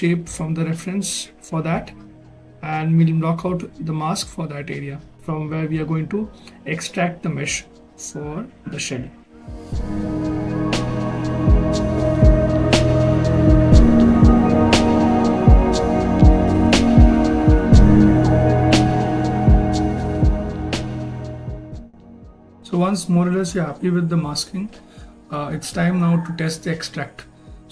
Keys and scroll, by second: 18.3 ctrl+z, 20.3 s, 23.4 s.